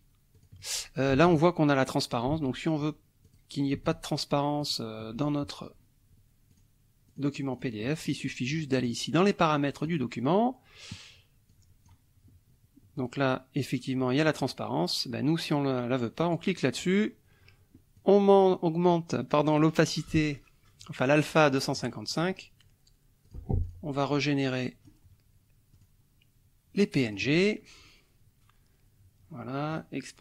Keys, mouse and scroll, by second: 0.3 alt+click, 1.2 alt+Tab, 2.5 alt+Tab, 3.2 alt+click, 3.9 alt+Tab, 4.6 alt+click, 6.5 click, 7.0 click, 7.5 click, 7.8 click, 9.8 click, 11.5 click, 13.0 click, 14.2 click, 16.2 click, 17.9-19.8 drag, 22.1 click, 23.2 click, 23.6 click, 24.0 click, 25.7 click, 27.0 click, 29.7 click.